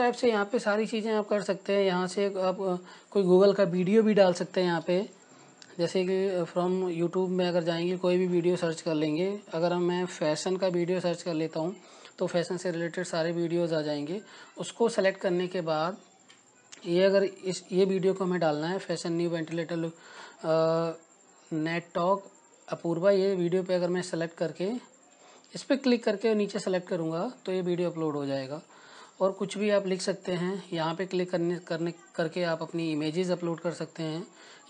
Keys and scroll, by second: 11.2-13.6 typing.